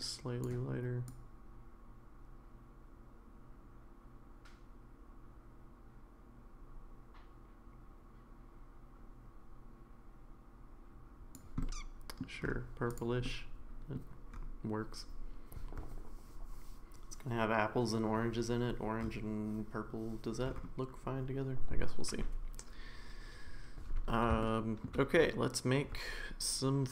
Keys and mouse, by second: 11.6-12.2 middle drag, 13.2-13.9 middle drag, 24.4-24.9 shift+middle drag.